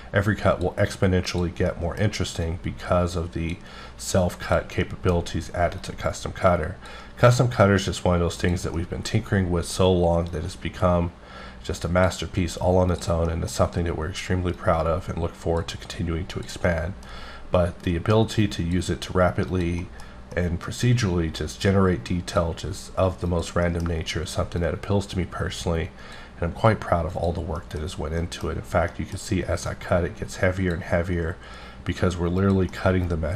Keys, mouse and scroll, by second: 1.3 click, 1.7 middle click, 2.4 click, 4.4 click, 4.8 middle click, 5.8 click, 8.4 click, 8.7 middle click, 10.3-12.2 drag, 12.9 click, 13.3 middle click, 13.5-14.6 scroll down 1, 14.6 click, 16.3 click, 16.7 middle click, 17.9 click, 19.8 middle click, 20.3 middle click, 21.4 click, 23.3 click, 23.6 middle click, 24.6-26.5 drag, 27.1 click, 27.6 middle click, 27.9 scroll up 2, 28.2 middle click, 28.4-28.9 scroll down 1, 28.9 middle click, 29.7 click, 32.4 click, 32.7 middle click.